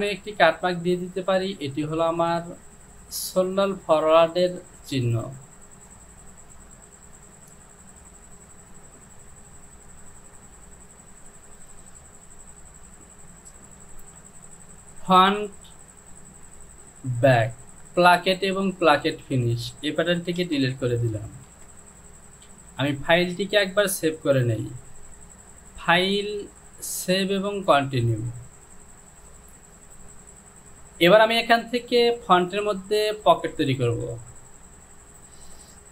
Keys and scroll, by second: 13.8 j, 20.5 shift+z, 21.0 shift+z, 22.5 j.